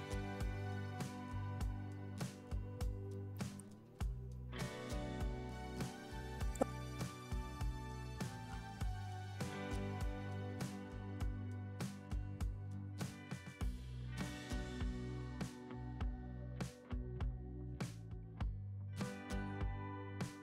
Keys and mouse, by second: 1.7 g, 3.0-3.8 drag, 4.5-5.2 alt+drag, 6.3 KP_7, 7.7 r, 8.4 Escape, 8.7 KP_3, 10.3 r, 12.0 drag, 12.5-13.1 alt+drag, 13.1-13.7 alt+middle drag, 14.3 g, 15.0-15.8 drag, 15.9 KP_1, 16.9 click, 17.4 shift+d, 18.1 click, 18.9 r, 19.8 Escape, 20.1 KP_3.